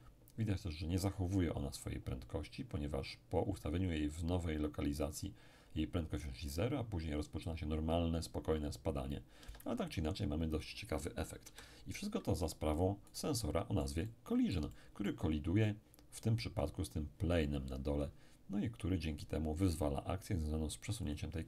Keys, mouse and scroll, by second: 9.4 Escape, 11.4 KP_1, 13.1-16.0 right drag, 13.4-16.0 middle drag, 18.5-19.6 scroll down 1, 21.1 click.